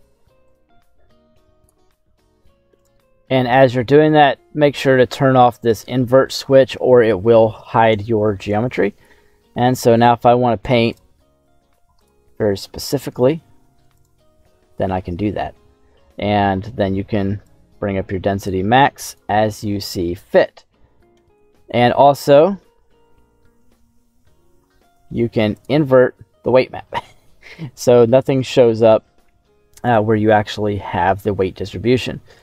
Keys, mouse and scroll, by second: 0.4 click, 2.7 click, 5.6 click, 8.0 scroll down 1, 8.2 middle click, 9.6 click, 10.9 click, 11.9 click, 12.3 middle click, 13.9 click, 14.9 middle click, 15.5 scroll up 2, 15.8 scroll down 2, 17.4-19.2 drag, 19.9-21.2 middle drag, 22.5-23.7 shift+middle drag, 23.9-24.5 scroll up 5, 24.6 shift+middle click, 25.4 click, 27.0 middle click, 29.7 click, 30.3-32.3 scroll down 2, 32.3 click.